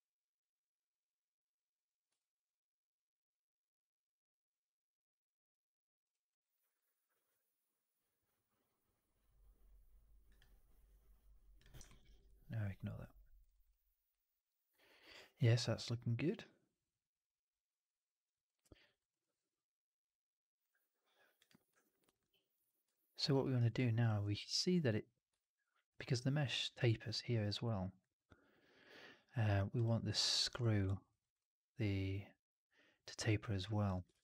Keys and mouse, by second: 2.0-5.9 alt+drag, 6.2 alt+right click, 6.4 alt+right drag, 6.6 alt+right drag, 11.7 alt+middle drag, 11.9 alt+right click, 12.1-13.3 alt+drag, 13.4 alt+right drag, 13.6-14.6 alt+drag, 14.8 alt+right drag, 15.0-18.3 alt+drag, 18.5 alt+right drag, 18.7 alt+right drag, 19.0 alt+click, 21.3 click, 22.0 click, 22.5 click, 22.8 alt+click, 23.3 alt+middle click, 23.5 alt+right click, 23.6 alt+click, 25.3 alt+click, 29.7 drag, 30.7 alt+drag, 31.1 alt+right drag, 31.3-33.7 alt+drag, 34.0 shift+Tab.